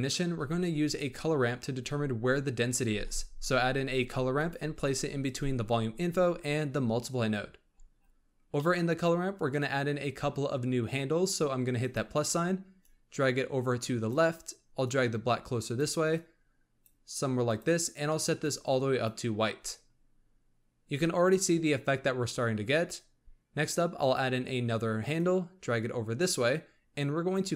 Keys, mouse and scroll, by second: 2.9 shift+a, 7.7-8.5 scroll up 5, 8.5-11.6 middle drag, 11.7-14.0 drag, 14.7 click, 16.1 click, 17.4 click, 23.9 click, 25.1 click, 26.2-27.5 drag.